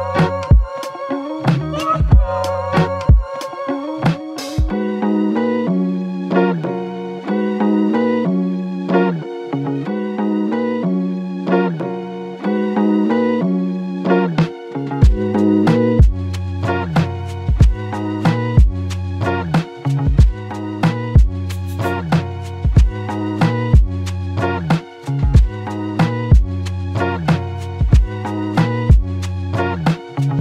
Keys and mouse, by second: 0.6 alt+click, 10.2 double click, 12.8 double click, 13.5 alt+click, 15.9 double click, 26.8 double click.